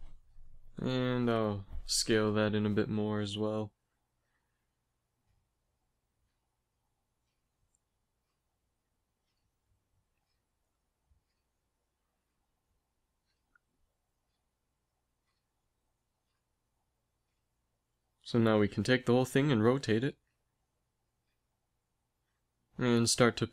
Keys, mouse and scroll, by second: 1.2 s, 4.7-7.3 drag, 5.2 s, 7.6 s, 14.4 KP_3, 15.0 KP_1, 16.6 a, 17.1 a, 18.4 r, 20.6 g, 22.7 g.